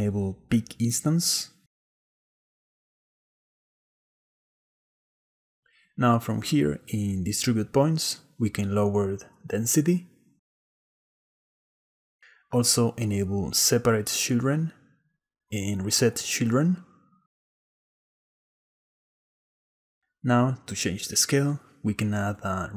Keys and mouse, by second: 2.3 click, 7.1-8.4 drag, 10.3 shift+click, 10.5 shift+middle click, 10.7 shift+click, 10.8 shift+middle click, 10.9 shift+click, 11.0 shift+middle click, 11.1 shift+click, 15.3 middle click, 18.9 click, 19.1 click, 20.2 click, 21.7 shift+a.